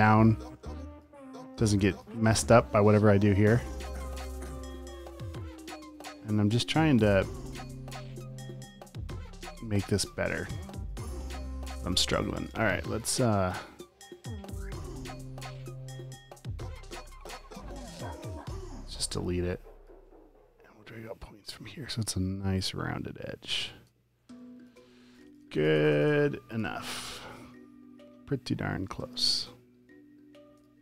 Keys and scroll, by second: 10.0 typing, 11.6-12.6 typing, 17.3 p, 24.4 space, 25.1 space, 26.6-27.8 typing, 29.0 a, 30.5 space.